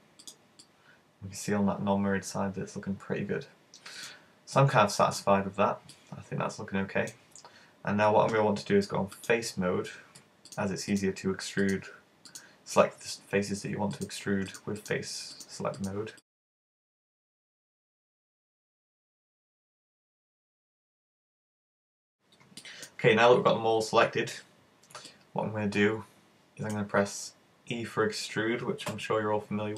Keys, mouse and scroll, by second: 0.3 click, 0.6 middle click, 4.8 middle click, 5.5-6.1 scroll down 4, 5.9 middle click, 9.2 click, 10.6 right click, 11.0 shift+right click, 11.2 shift+right click, 11.7 shift+right click, 11.9 shift+right click, 12.4 shift+right click, 13.2-13.5 scroll up 4, 13.9 shift+right click, 14.2 shift+right click, 14.5 shift+right click, 14.9 shift+right click, 15.4 shift+right click, 15.5 shift+right click, 15.8 shift+right click, 16.2 shift+right click, 16.3 shift+right click, 16.3 middle click, 16.6 shift+right click, 16.7 shift+right click, 16.8 middle click, 17.3 shift+right click, 17.5 middle click, 17.9 shift+right click, 18.2 shift+right click, 18.4 shift+right click, 19.0 shift+super+z, 19.1 shift+right click, 19.2 shift+right click, 19.5 shift+right click, 19.7 shift+right click, 19.9 middle click, 20.5 shift+right click, 20.9 middle click, 21.2 shift+right click, 21.3 shift+right click, 21.4 middle click, 25.1 middle click, 27.0-27.7 scroll down 7, 27.7-28.9 scroll up 4, 28.9 r.